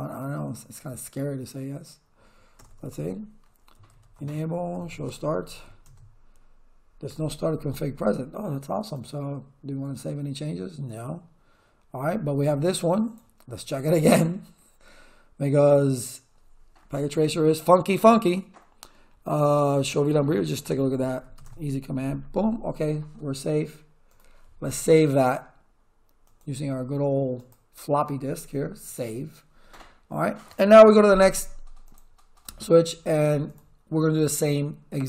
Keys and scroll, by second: 2.5 Return, 3.5-6.1 typing, 19.4-21.8 typing.